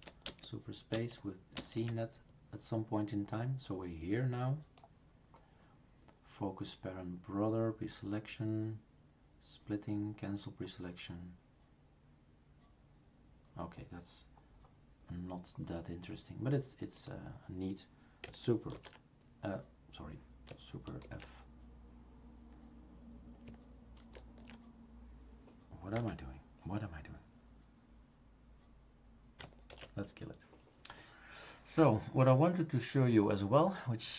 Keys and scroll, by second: 1.6 super+space, 18.7 ctrl+f, 21.0 super+f, 24.0 super+f, 25.9 Escape, 29.7 shift+super+q.